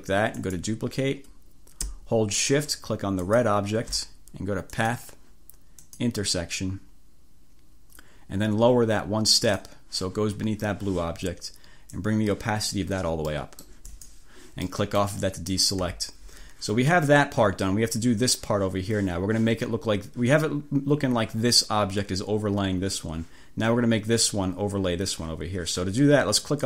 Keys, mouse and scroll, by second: 0.4 click, 3.2 shift+click, 4.8 click, 5.9 click, 9.5 click, 12.1 click, 13.4 click, 14.0 click, 14.8 click, 15.6 click, 16.0 1, 26.5 click.